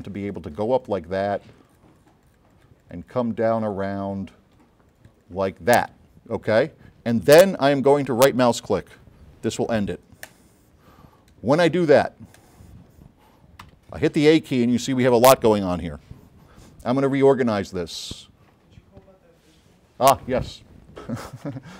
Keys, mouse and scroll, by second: 0.3 click, 0.4-1.1 drag, 3.2 click, 4.3 click, 4.6 click, 10.3 right click, 12.5 click, 13.7 a, 17.6 click.